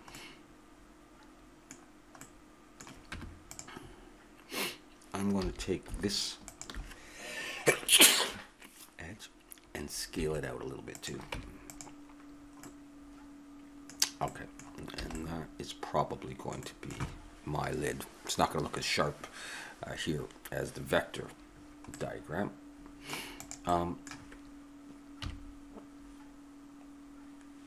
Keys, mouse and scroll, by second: 3.1 Tab, 5.4 a, 10.1 s, 11.4 Tab, 12.6-14.0 drag, 15.0 a, 16.7-18.5 middle drag, 22.0-23.4 middle drag, 23.4-25.2 drag, 24.8 middle click, 25.2 KP_3.